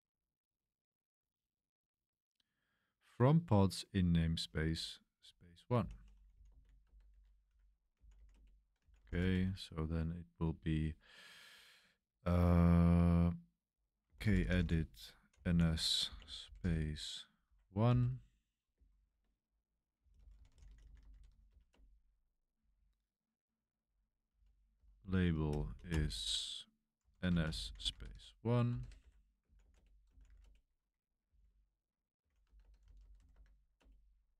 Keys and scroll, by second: 0.6-1.4 typing, 4.9-9.4 typing, 7.5 Escape, 13.8-18.4 typing, 17.4 Escape, 18.9 ctrl+c, 19.7-34.0 typing.